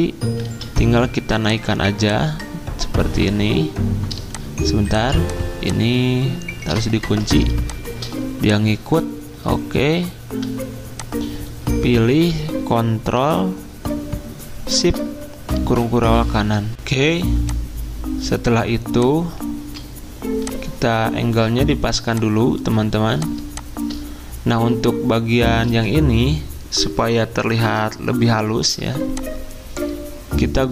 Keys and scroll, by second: 0.4 ctrl+z, 7.0 ctrl+2.